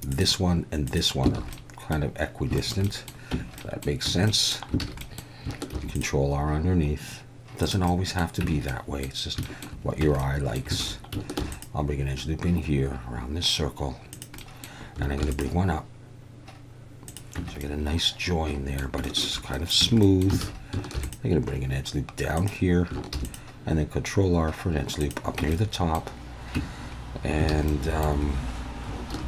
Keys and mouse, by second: 0.9 click, 1.4 alt+a, 1.5-1.9 middle drag, 2.6 shift+middle click, 2.8 middle click, 3.3 Tab, 3.6 middle click, 4.1 Tab, 4.3 middle drag, 4.8 alt+a, 5.0 middle click, 5.7 ctrl+r, 7.6 click, 8.0 middle click, 8.4 Tab, 8.7 middle click, 9.4 shift+middle drag, 10.0 Tab, 10.2-10.6 middle drag, 10.8 alt+a, 11.4 ctrl+r, 14.1 click, 14.5 middle click, 15.2 ctrl+r, 17.1 click, 17.4 Tab, 17.6-18.8 middle drag, 19.0 shift+middle drag, 19.6 middle click, 19.8 Tab, 20.0 middle click, 20.4 alt+a, 20.9 ctrl+r, 22.4 click, 23.1 ctrl+r, 25.0 click, 25.4 Tab, 25.5 middle click, 26.6 Tab, 27.5 alt+a, 27.7 middle click, 29.1 ctrl+r.